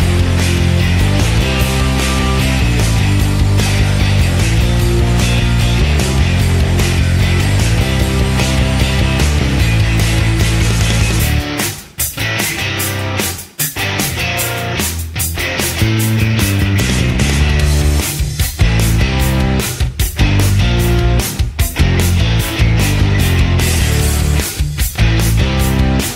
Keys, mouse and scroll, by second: 22.5 z.